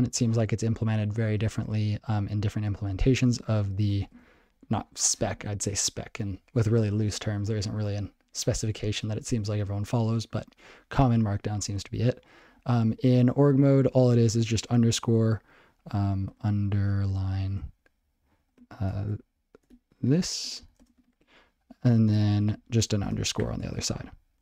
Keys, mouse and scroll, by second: 14.4 _, 16.2-17.3 typing, 19.3 space, 21.4-24.4 typing, 23.8 ctrl+g.